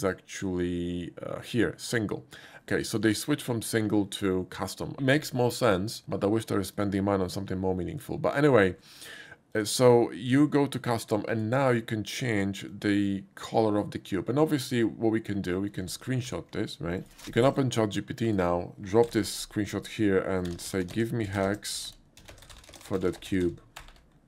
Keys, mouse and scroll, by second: 0.0 click, 1.8 click, 4.1 click, 4.2 click, 6.7 click, 8.3 shift+middle drag, 9.5 shift+click, 11.3 shift+click, 12.7-14.7 drag, 16.2 ctrl+Print, 18.3 click, 19.0 ctrl+v, 20.4-24.2 typing.